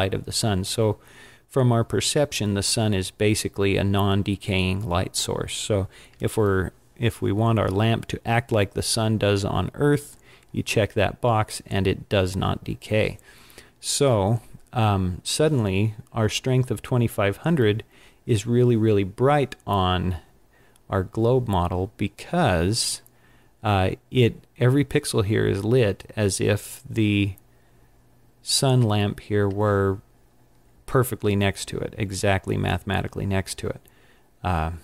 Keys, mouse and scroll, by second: 14.1-16.5 scroll down 3.